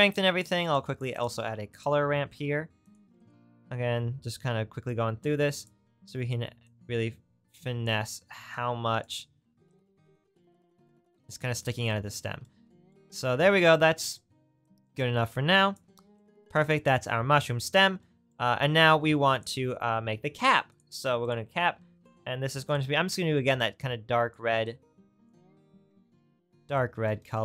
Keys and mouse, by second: 1.2-4.5 shift+drag, 1.4 shift+a, 4.9-16.7 middle drag, 19.3 middle click, 20.7-22.9 middle drag, 22.9-27.4 right drag.